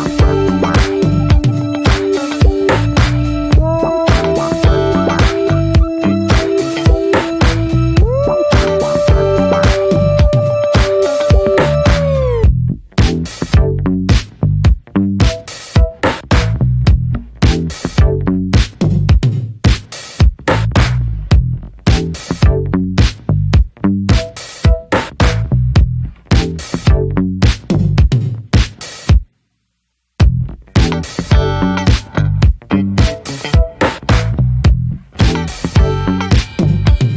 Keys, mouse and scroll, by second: 0.0-0.4 drag, 0.4-0.9 middle drag, 0.9 3, 1.0 click, 1.4-1.8 middle drag, 1.8 shift+d, 2.4-2.9 middle drag, 2.9 s, 4.4 middle click, 4.7 e, 5.7-7.1 middle drag, 7.1 ctrl+b, 10.1 scroll down 4, 10.3 middle drag, 10.5-10.9 scroll up 2, 10.9 click, 11.3 l, 12.1-13.1 alt+middle drag, 12.6-13.1 scroll up 1, 13.1 alt+z, 13.9 click, 14.2 alt+z, 14.9 alt+z, 15.1 click, 15.6 l, 18.3 middle click, 18.7 s, 19.8-20.7 middle drag, 20.7 scroll up 1, 20.9 scroll down 1, 21.2 drag, 21.6-22.2 middle drag, 22.2 s, 24.3 drag, 24.5 scroll down 2, 24.7-25.1 middle drag, 25.1-25.5 scroll up 1, 25.5 ctrl+z, 25.8 ctrl+z, 26.1 middle click, 26.3 Tab, 26.5 click, 26.7 ctrl+a, 27.1-27.4 scroll down 3, 27.4 click, 29.8-30.8 alt+middle drag, 30.8 drag, 31.4-32.0 scroll up 6, 31.7 shift+middle drag, 32.0 s, 33.2 alt+middle click, 34.0 s, 34.6 alt+middle click, 35.0 Tab, 35.2 scroll up 1, 35.5 Tab, 35.8 click, 36.0-37.1 right drag.